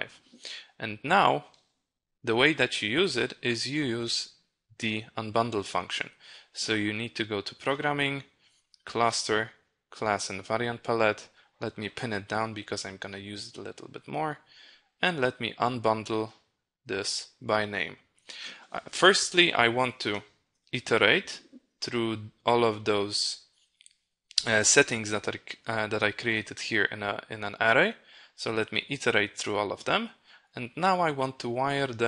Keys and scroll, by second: 20.0 ctrl+b.